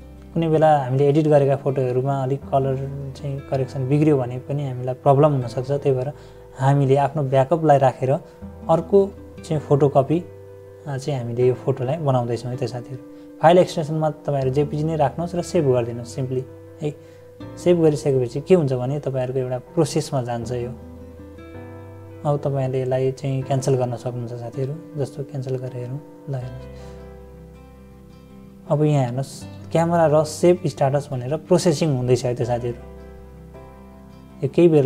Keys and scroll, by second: 3.4 =, 7.1 -, 16.6 =, 19.0 -, 19.2 -, 29.6 =.